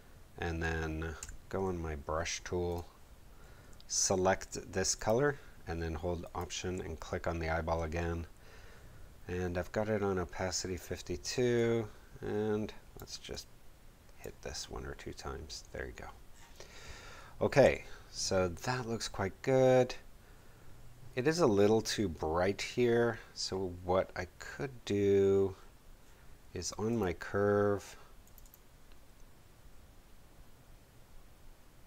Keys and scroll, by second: 1.1 b, 17.6 v.